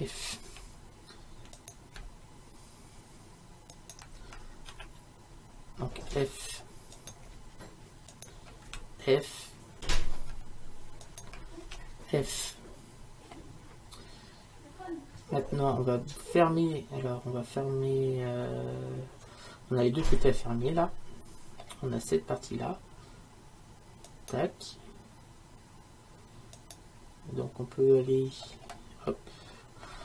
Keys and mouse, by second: 0.5 f, 1.6-6.2 right drag, 4.7 d, 6.2 f, 7.0-8.7 right drag, 8.7 f, 9.9-11.7 right drag, 11.7 f, 24.1-28.5 right drag, 28.5-30.0 middle drag.